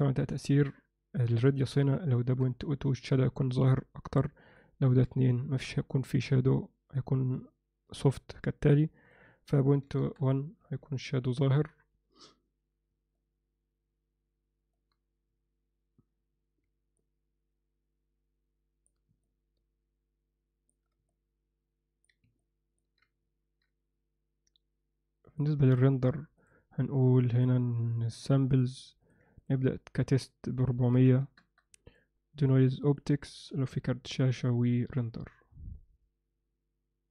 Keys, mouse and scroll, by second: 0.5-3.2 drag, 4.5-6.6 drag, 9.1-10.8 drag, 11.4 alt+a, 13.2-14.7 middle drag, 17.0-18.9 alt+middle drag, 19.2-20.8 alt+shift+middle drag, 21.1 alt+middle click, 22.4 ctrl+middle click, 25.3 click, 25.7 click, 26.4 drag, 27.4 drag, 28.5 click, 29.1 click, 29.6-31.5 drag, 31.1 0, 32.0 drag, 32.4-33.0 drag, 33.5 ctrl+s, 35.2 F12.